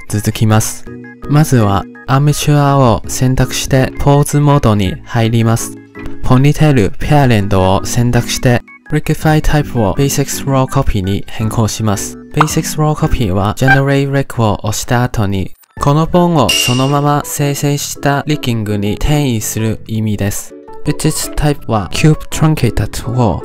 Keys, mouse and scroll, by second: 0.3 click, 3.7 ctrl+Tab, 6.9 shift+middle click, 7.3-7.8 scroll up 1, 7.8 KP_Decimal, 8.1 click, 8.3 click, 8.5-9.2 scroll down 4, 9.2 click, 9.5-10.5 scroll down 7, 10.5-12.8 drag, 20.8-21.8 scroll down 4, 21.8-23.4 drag.